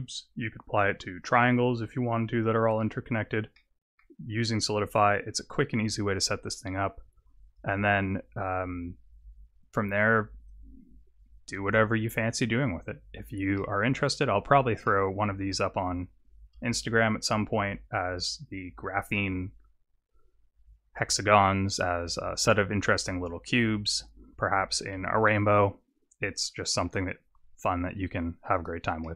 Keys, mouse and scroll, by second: 3.5 middle click, 13.6 middle click, 14.3-14.9 scroll down 1, 14.9 middle click, 14.9-15.3 scroll down 2, 16.8 KP_0, 26.8 alt+a, 27.7-28.2 scroll down 3, 28.6 click, 29.0 middle click.